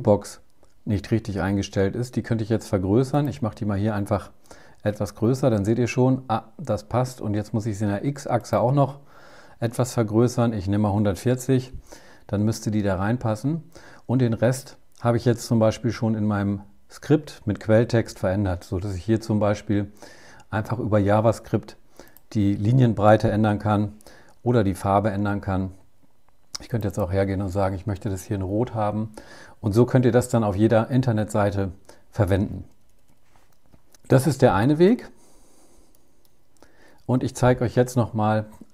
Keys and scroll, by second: 9.4 BackSpace, 9.6 Delete.